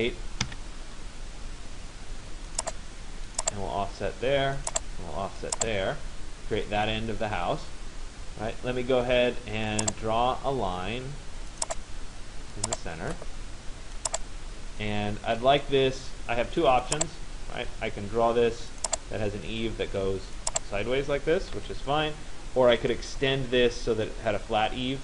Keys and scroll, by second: 0.6 Return, 21.2 Return.